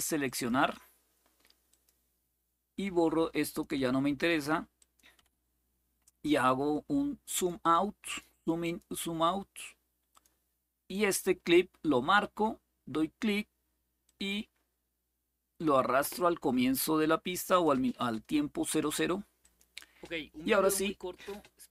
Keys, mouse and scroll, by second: 0.0 click, 1.4 click, 2.6 Delete, 3.2 click, 3.5 Delete, 4.5 click, 4.9 Delete, 7.1 click, 7.8 click, 8.4 click, 9.8 click, 10.2 click, 13.8-15.4 drag, 16.5 click, 19.1 click.